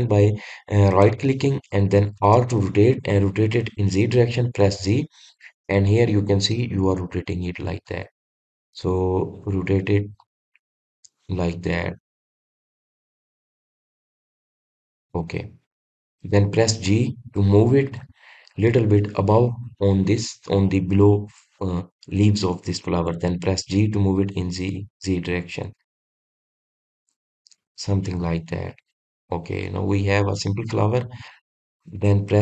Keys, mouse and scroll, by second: 16.2-18.9 middle drag, 18.9 g, 29.0-30.1 middle drag, 30.1 click, 30.6-32.4 middle drag.